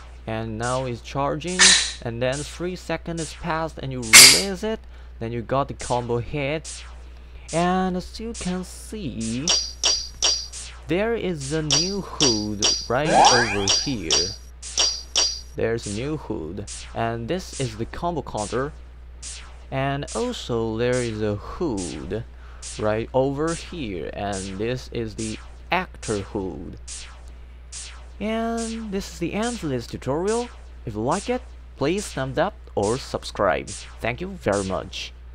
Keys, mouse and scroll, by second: 9.4 z, 9.6 z, 10.0 z, 10.1 z, 11.6-15.1 typing.